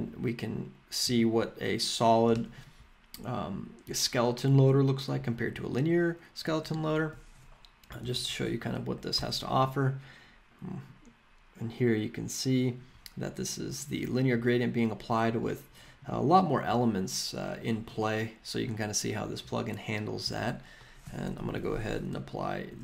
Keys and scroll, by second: 8.0 super+/, 9.1 Return, 20.2 super+/, 21.0-22.1 typing, 22.7 Tab.